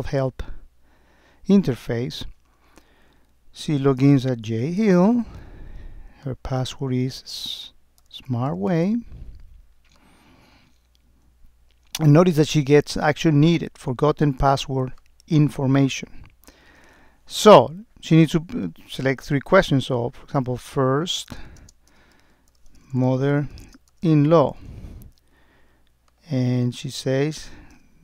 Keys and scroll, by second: 21.7 space, 23.1 space, 23.7 space.